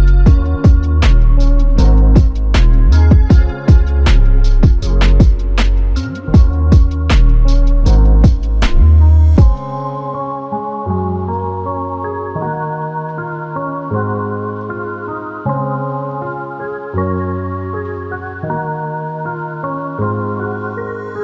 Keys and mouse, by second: 0.4 double click, 1.6 alt+click, 4.6 double click, 6.7 alt+click, 8.9 double click, 9.6 alt+click, 10.7 double click, 11.2 alt+click, 13.9 double click, 15.4 alt+click, 16.5 double click, 17.4 alt+click, 18.6 double click, 19.2 alt+click, 20.8 double click.